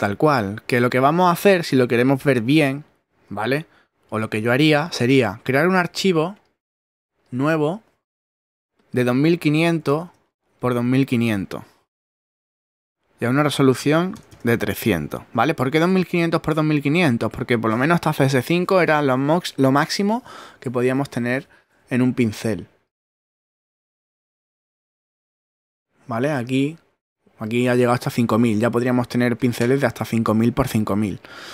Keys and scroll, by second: 4.1 super+d, 9.5 2, 11.8 2, 12.1 0, 13.7-14.6 typing, 30.6 super+z.